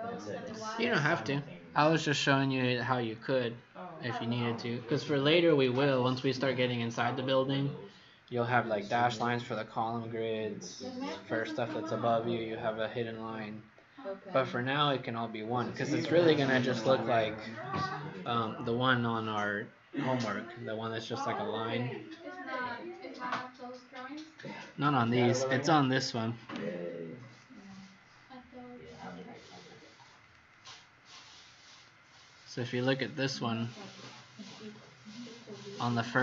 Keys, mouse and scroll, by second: 27.3 click, 30.4 click, 32.4 click, 32.6 click.